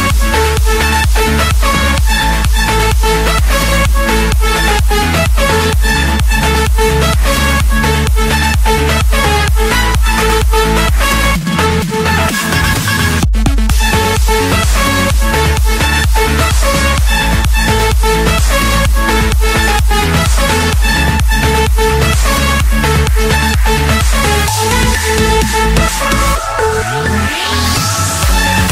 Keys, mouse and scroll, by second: 1.3 click, 3.4-4.5 drag, 5.2-6.3 drag, 7.4 middle click, 7.6-8.8 scroll, 10.8 7, 12.1 Return, 15.4 Escape, 18.0 click, 21.8 click, 22.1 Escape, 22.7 click, 23.2 right click, 25.0 click, 26.5 click, 27.7 Escape, 28.3 click.